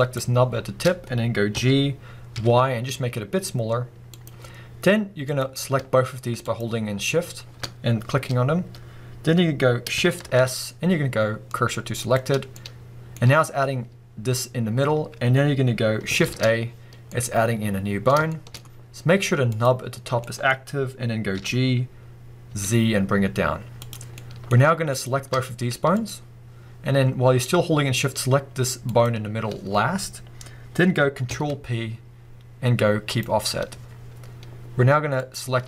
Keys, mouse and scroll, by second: 0.0 shift+click, 1.5 g, 4.2 click, 5.2 click, 6.4 shift+click, 10.2 shift+s, 12.5-19.5 middle drag, 16.2 shift+a, 19.5 click, 20.2-23.9 middle drag, 21.3 g, 23.9 click, 24.2 middle click, 24.9 click, 25.9 shift+click, 28.8 shift+click, 31.2 ctrl+p, 35.2 click.